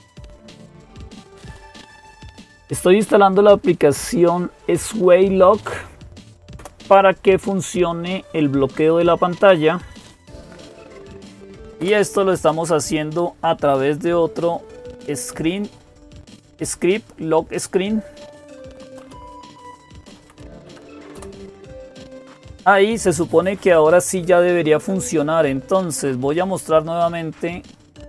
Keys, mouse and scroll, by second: 6.4 Return, 10.7-11.6 typing, 17.9-20.9 typing.